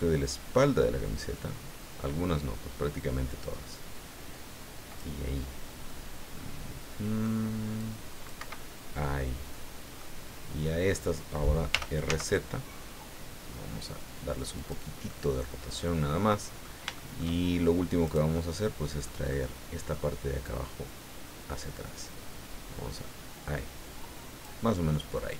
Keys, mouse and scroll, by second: 5.9-7.4 middle drag, 7.8 click, 8.4 Escape, 8.8 scroll down 1, 9.2-10.2 middle drag, 10.3 scroll up 1, 10.7 scroll down 1, 11.7 r, 12.1 z, 14.6 click, 15.1 middle click, 16.1 middle click, 16.9 shift+middle click, 18.0 right click, 18.3 middle click, 18.8 click, 19.3 click, 20.4-22.4 right drag, 22.4 scroll up 1, 24.9 click.